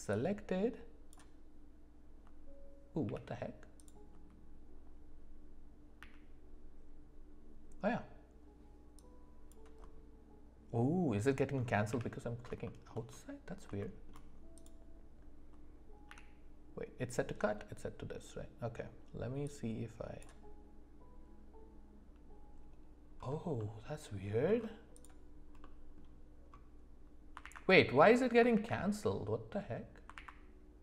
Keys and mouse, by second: 0.2 click, 3.0 n, 3.8 click, 6.0 d, 11.9 n, 12.6 shift+middle click, 13.8 shift+middle click, 14.5 click, 16.1 d, 19.4 click, 23.6-24.1 middle drag, 24.9 click, 25.6 middle click, 27.4 alt+w, 28.5 alt+w, 30.1 alt+w.